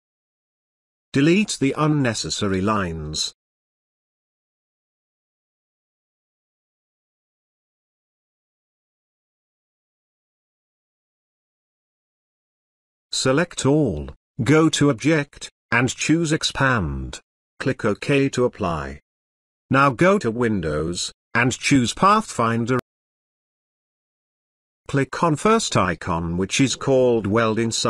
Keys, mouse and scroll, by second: 0.2-0.8 alt+click, 1.8-2.7 click, 3.7 Delete, 4.1-4.7 click, 4.7 Delete, 5.2-5.8 click, 5.8 Delete, 6.4-7.0 click, 6.9 Delete, 7.7 click, 8.0 Delete, 8.5-9.7 drag, 10.2 Delete, 10.9 click, 11.4 space, 11.6-12.5 ctrl+drag, 21.4 click, 23.7 click, 26.7 space, 26.9 click, 27.2-27.5 space.